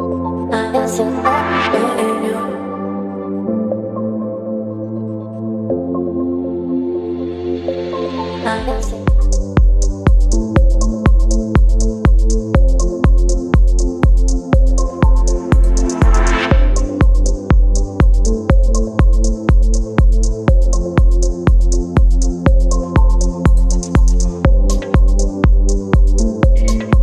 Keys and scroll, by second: 0.2 space, 1.1 t, 3.2 KP_2, 5.3 ctrl+a, 10.7 v, 11.9 ctrl+t, 16.0 Return, 16.8 space, 17.7 t, 18.6 o, 19.4 f, 21.0 v, 21.5 ctrl+t.